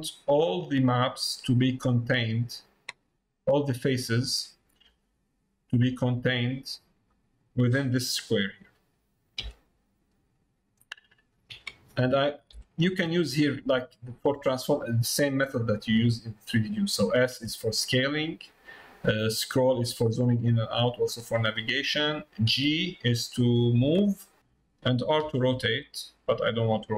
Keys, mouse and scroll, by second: 1.4 middle click, 2.4-3.5 middle drag, 7.0 middle click, 21.5 middle click.